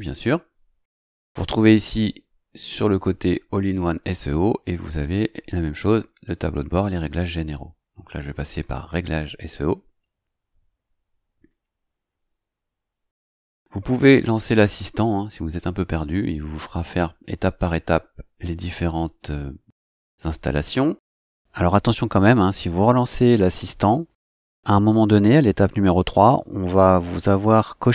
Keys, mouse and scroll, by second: 8.6 click, 20.4 scroll down 2.